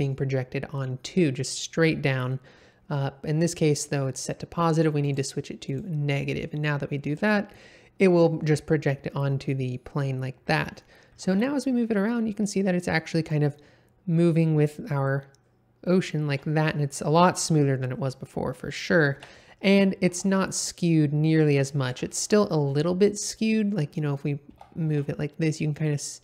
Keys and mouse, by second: 5.0 click, 5.6 click, 11.1 g, 11.2 x, 17.1 Escape, 19.1 KP_7, 20.1 g, 20.2 x, 21.9 Escape, 22.2-23.4 middle drag, 24.5 g, 24.8 x.